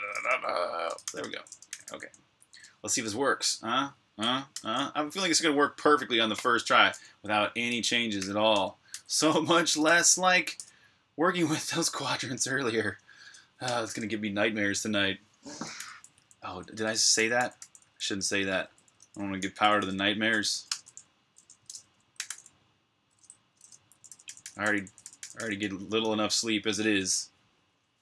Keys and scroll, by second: 4.0-5.6 typing, 5.6 super+h, 7.8-11.2 typing, 13.1 shift+Tab, 13.5 typing, 15.3-20.4 typing, 22.0 g, 23.5-27.1 typing, 25.9 super+r.